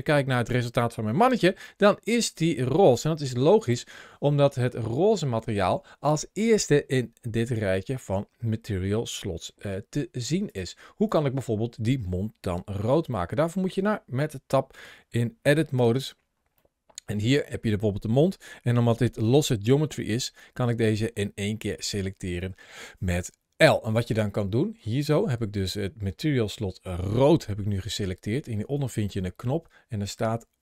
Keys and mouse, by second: 1.6 shift+middle click, 1.9-2.4 middle drag, 3.4 ctrl+shift+a, 10.3 click, 10.9 click, 13.1 shift+middle click, 15.6 Tab, 16.5 middle click, 18.7 l, 19.8 l, 20.3-21.7 middle drag.